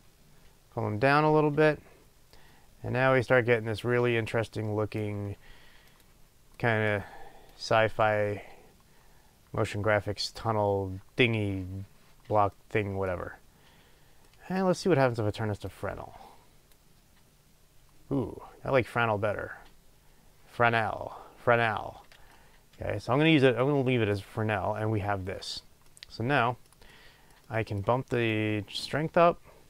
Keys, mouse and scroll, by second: 7.5-29.6 drag.